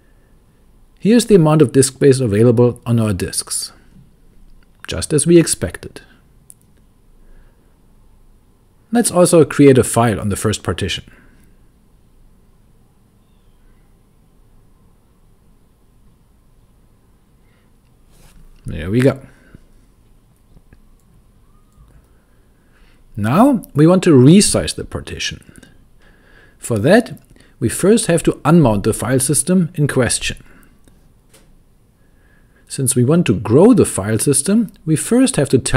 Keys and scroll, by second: 0.0-4.1 typing, 8.7-13.0 typing, 16.1 typing, 17.6 Return, 28.9-32.0 typing, 35.2-35.7 typing.